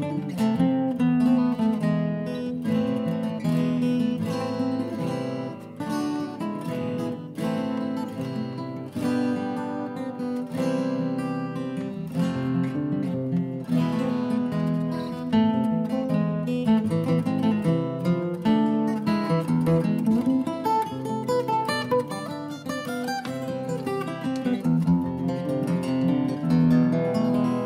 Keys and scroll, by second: 1.4 typing, 2.9 typing, 3.4 Escape, 4.1 `, 5.5 Escape, 7.7-8.4 typing, 12.8 typing, 14.8 typing, 15.2 Delete, 16.7-17.6 typing, 18.7-19.7 typing, 20.7-21.5 typing, 27.0-27.6 typing.